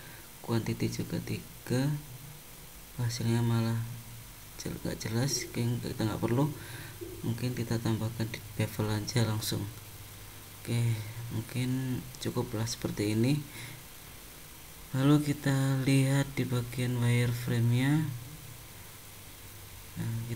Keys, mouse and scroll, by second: 1.5 click, 3.2 click, 5.5 click, 6.8 click, 8.7 middle click, 9.6 middle click, 10.5 scroll up 1, 11.1 middle click, 13.9 middle click, 15.0 middle click, 15.7 middle click, 16.5 click, 17.8 click, 18.3 middle click.